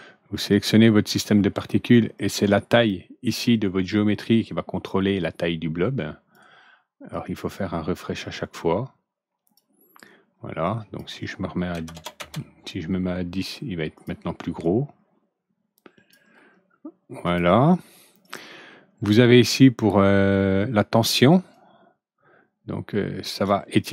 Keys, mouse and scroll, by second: 0.4 click, 2.1 click, 5.1-6.2 drag, 7.0-9.5 drag, 10.6 click, 11.7 ctrl+n, 13.9 click, 14.6-16.0 drag, 17.2 click, 18.2 click, 21.4-23.4 drag.